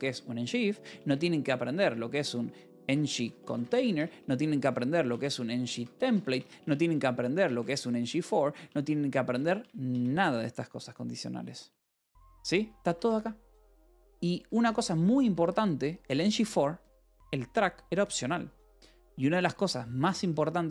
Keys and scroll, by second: 0.0-0.6 typing, 1.7-8.4 typing, 10.0 Escape, 11.7 j, 12.8 a, 13.0 Tab, 13.5 Escape, 13.7 k, 14.3 e, 15.9 h, 16.7 v, 17.3 e.